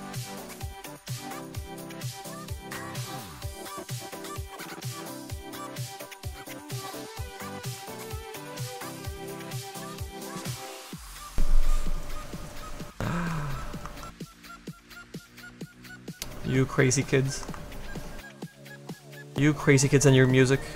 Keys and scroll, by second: 16.6 s.